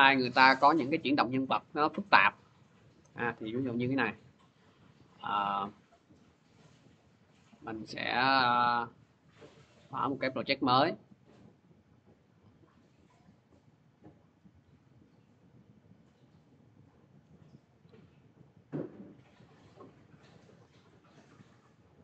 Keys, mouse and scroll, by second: 1.1 click, 4.2 click, 4.3 click, 8.0 click, 9.1 click, 12.0 click, 12.8 click, 13.5 click, 14.9 click, 15.1 click, 15.6 click, 15.8 click, 16.5 click, 16.7 click, 18.0 click, 18.2 click, 21.5 click, 21.6 click.